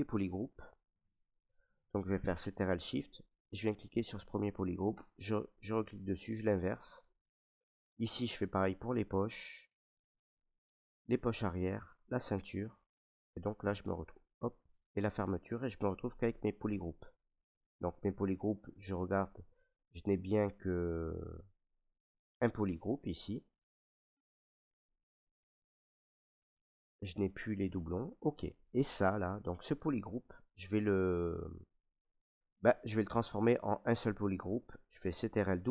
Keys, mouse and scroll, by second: 3.2 click, 5.0 click, 7.9 click, 9.7 click, 10.7 click, 11.8 click, 13.5 right click, 14.6 click, 16.2 click, 16.7 alt+right click, 17.5 ctrl+right click, 18.1 alt+right click, 20.7 right click, 23.9 right click, 27.2 right click, 28.0 right click, 28.7 ctrl+right click, 28.8 ctrl+right click, 28.9 ctrl+click, 29.4 click, 30.0 ctrl+click, 31.0 alt+click, 31.8 ctrl+right click.